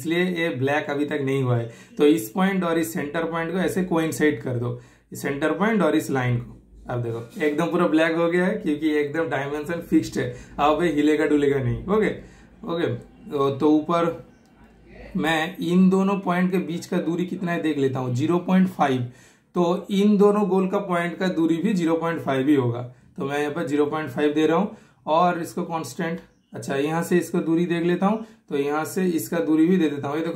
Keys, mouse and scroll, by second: 0.6 super+scroll up 1, 0.7 super+scroll down 1, 1.3 super+click, 3.2 super+click, 4.8 super+click, 5.8 super+click, 8.0 super+scroll down 1, 8.4 super+right click, 9.0 super+click, 11.0 super+click, 12.6 super+click, 12.9 super+right click, 14.0 super+click, 19.2 super+right click, 19.6 super+click, 20.9 super+click, 21.2 super+click, 21.5 typing, 22.8 super+click, 24.5 super+Return, 25.9 super+click, 27.3 typing, 27.8 super+right click, 28.4 super+click, 29.4 super+click, 29.5 super+click.